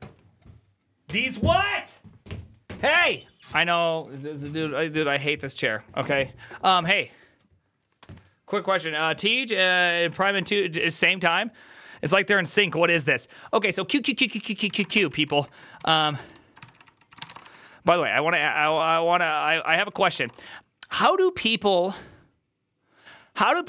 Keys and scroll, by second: 14.4-20.6 typing, 19.6 ctrl+c, 19.7 ctrl+c.